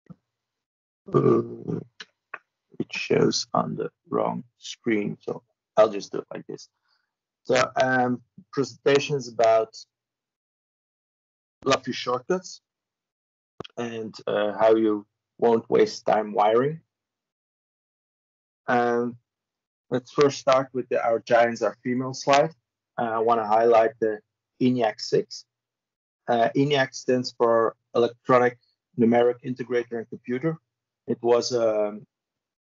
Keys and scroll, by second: 1.8 Escape.